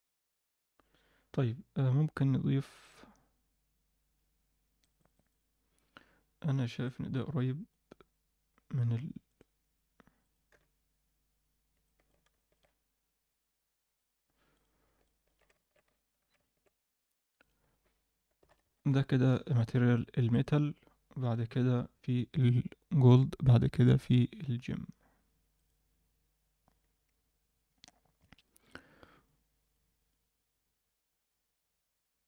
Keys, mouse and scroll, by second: 5.1 click, 5.2 click, 9.6 click, 10.2 click, 10.5 n, 11.8 alt+middle click, 12.3 shift+middle click, 13.9 click, 14.5 click, 15.0 middle click, 15.5 ctrl+alt+middle click, 15.9 shift+middle drag, 16.4 ctrl+middle click, 17.4-19.2 drag, 23.7-25.6 drag.